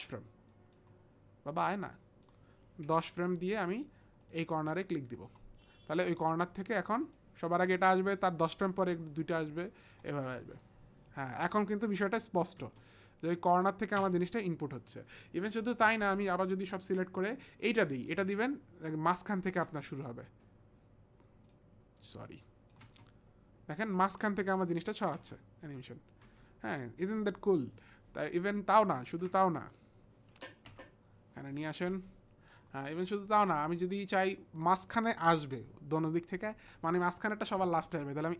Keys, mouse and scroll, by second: 0.5 click, 1.5 click, 1.9 click, 2.9 KP_1, 3.0 KP_0, 4.2 click, 5.2 click, 7.1 click, 10.1 space, 12.0 click, 12.6 space, 14.3 click, 14.3 space, 15.2 click, 15.9 ctrl+a, 16.8 ctrl+a, 16.8 click, 16.8 space, 18.1 click, 19.5 space, 22.5 click, 22.5 space, 22.8 space, 24.2 space, 24.7 click, 25.2 space, 26.3 space, 28.4 click, 29.0 ctrl+a.